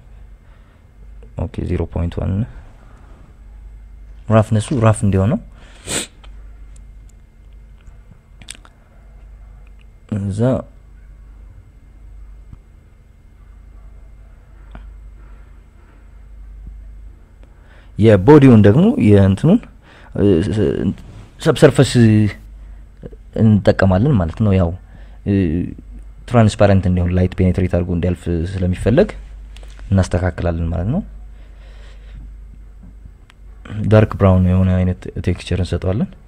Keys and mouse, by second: 1.7 click, 2.7 click, 9.6 click, 10.6 KP_Subtract, 10.8 KP_Subtract, 11.0 Tab, 11.8 click, 12.1 Tab, 13.3 click, 18.1-19.9 drag, 24.5 click, 27.0 click, 27.6 click, 33.7 click.